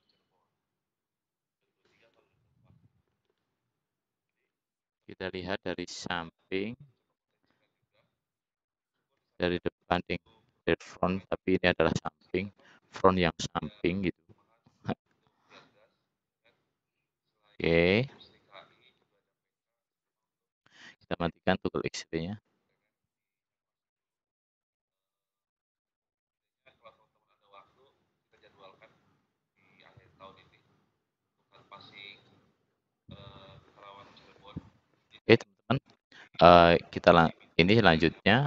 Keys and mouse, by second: 6.3 `, 8.7 `, 9.1 `, 9.9 `, 18.7 click, 19.1 middle click, 21.7 middle click, 33.0 click, 33.3 middle click.